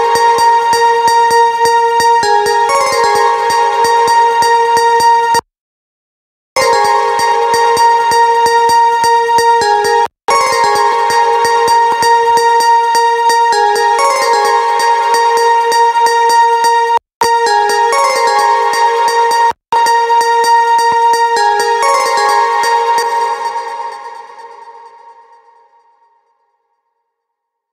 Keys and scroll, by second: 22.4 space.